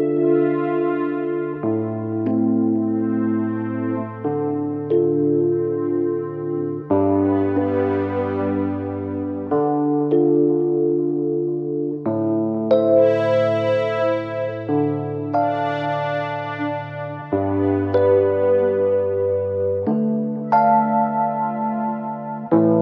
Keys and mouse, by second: 1.4 click, 4.4 click, 5.4 click, 7.8 alt+click, 8.4-8.9 alt+drag, 9.3 click, 12.6-14.8 drag, 15.9 alt+click, 16.6-17.0 alt+drag, 17.1 click, 19.1 drag, 19.9 click.